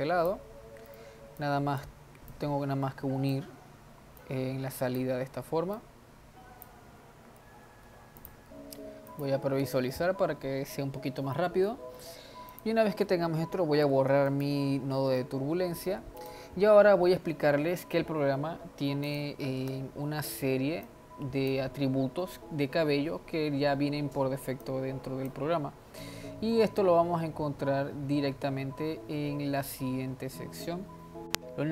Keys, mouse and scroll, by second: 0.7-1.0 scroll down 2, 1.0 middle click, 1.5-2.5 drag, 4.4 click, 5.8 click, 8.1 ctrl+s, 8.5 click, 8.7 z, 11.4-12.6 middle drag, 12.6 click, 13.9 x, 15.2-16.2 middle drag, 16.2 drag, 16.8-19.1 scroll up 1, 19.1 click, 19.8 x, 20.9 click, 24.7-25.8 drag, 25.8 scroll down 5, 27.0-27.7 scroll down 5.